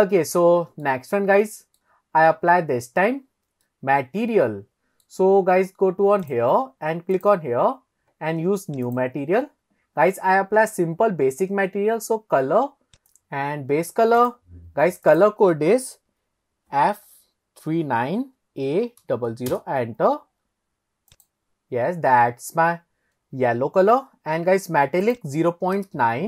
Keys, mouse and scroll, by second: 1.4 middle click, 2.1-2.5 scroll up 1, 3.7-5.1 middle drag, 6.3 click, 7.2 click, 8.9-9.5 drag, 13.0 ctrl+z, 14.2 click, 19.2 KP_0, 24.0-25.1 scroll down 1, 25.2-26.2 drag.